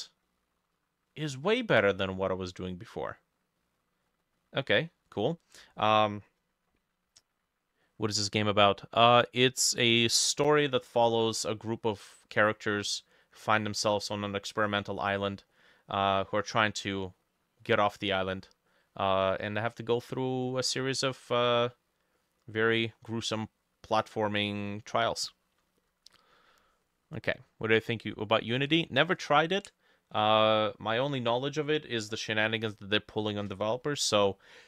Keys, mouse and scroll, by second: 0.3 middle click, 1.1 middle click, 2.0 middle click, 2.6 middle click, 3.6 middle click, 3.8-4.4 scroll down 9, 4.4 middle click, 4.9 middle click, 5.4-5.8 scroll up 3, 5.8 middle click, 7.9 middle click, 10.6 middle click, 10.9-11.4 scroll up 3, 11.4 middle click, 15.0 middle click, 15.6 middle click, 16.4 middle click, 17.0 middle click, 17.6 middle click, 18.2 middle click, 18.7 middle click, 20.0-21.0 scroll down 5, 20.5 middle click, 21.3-21.7 scroll up 3, 21.7 middle click, 22.2 middle click, 22.6 middle click, 22.9-23.4 scroll up 5, 23.4 middle click, 24.9 scroll down 2, 25.2 middle click, 26.9 middle click, 33.8 middle click.